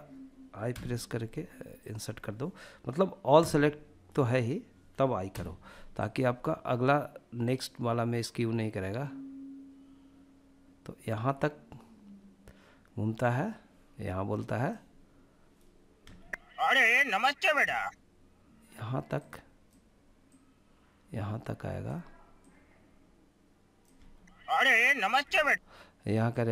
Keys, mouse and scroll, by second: 2.5 a, 4.4 i, 6.6-13.9 drag, 15.2 space, 16.8 space, 18.3 click, 19.4 click, 21.6 click, 23.1 space, 24.4 space, 25.5-26.5 drag.